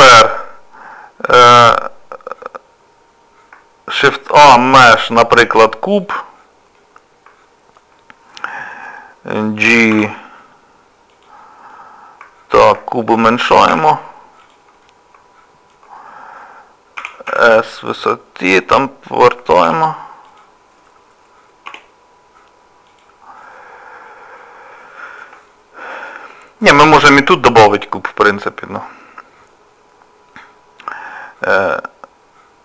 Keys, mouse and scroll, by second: 4.1 shift+a, 6.8 scroll down 1, 6.8 middle click, 11.7 scroll up 1, 11.7 g, 11.7 middle click, 11.7 scroll down 1, 12.7 scroll up 1, 12.7 g, 13.0 shift+middle click, 13.2-13.7 scroll down 1, 13.7 s, 14.9 middle click, 17.0 s, 19.7 r, 21.7 g, 23.6 middle click, 25.5 shift+middle click.